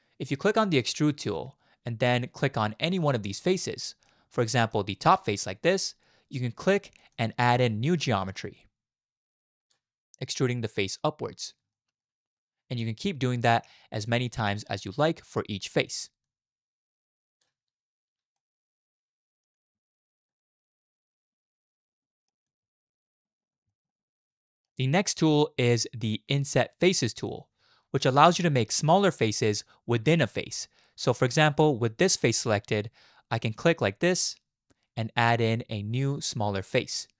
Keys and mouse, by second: 2.4 middle click, 3.4 right click, 4.1 middle click, 5.1 right click, 7.2-8.7 right drag, 11.7 shift+click, 12.0 click, 12.0 middle click, 12.0 right click, 12.3 middle click, 13.0 click, 13.3 shift+middle click, 14.1-17.4 drag, 18.4-19.4 middle drag, 19.5 click, 19.7-20.3 drag, 20.4 middle click, 20.5 click, 20.6 middle click, 20.6 right click, 20.8-21.4 middle drag, 21.4-21.7 drag, 21.4-21.7 right drag, 21.6 middle click, 21.7 middle click, 21.9 click, 22.1 right click, 22.1 middle click, 22.4 shift+click, 22.8 shift+middle click, 23.1 click, 23.7 shift+click, 24.0 click, 24.2 middle click, 27.2 click, 28.2 shift+click, 28.6 middle click, 31.7 middle click, 33.5 click, 34.1-36.9 drag.